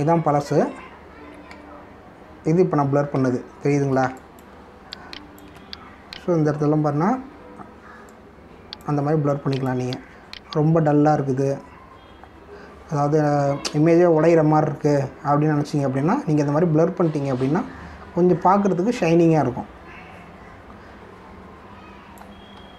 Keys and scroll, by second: 0.0 ctrl+z, 2.5 ctrl+z, 4.1 ctrl+z, 4.8 space.